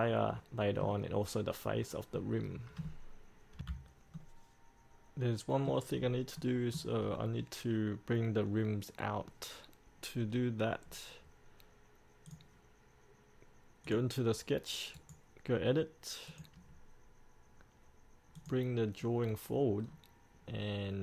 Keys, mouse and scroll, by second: 0.5 middle click, 1.9-2.3 scroll up 1, 2.3-3.4 middle drag, 3.8 F8, 4.3-6.2 middle drag, 6.2-6.6 scroll up 1, 6.6 middle click, 7.2-12.5 scroll down 1, 12.5 click, 15.2 right click, 16.5 click, 20.0-20.7 scroll down 1, 20.7-21.0 scroll up 1.